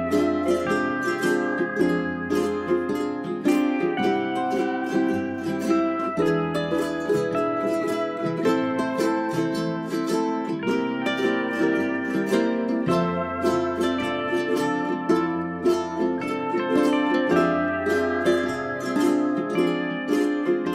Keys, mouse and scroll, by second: 0.3 1, 0.8-3.7 drag, 5.3 scroll up 1, 5.6 click, 6.3 right click, 7.5 End, 7.9 Page_Up, 9.0 click, 10.0 ctrl+Page_Down, 10.5 Page_Down, 11.4 1, 11.9-18.4 drag, 18.6 click, 20.4 click, 20.6 scroll down 1.